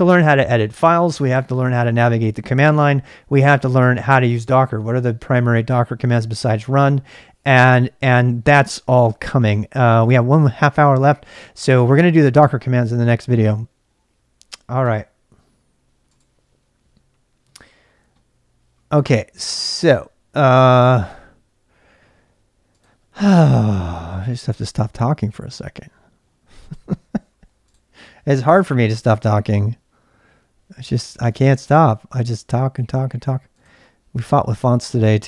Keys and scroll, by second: 29.0 super+Tab, 30.8 super+Tab, 31.1 super+Tab, 31.3 super+Tab, 31.5 super+Tab, 31.8 super+Tab, 34.4 super+Tab.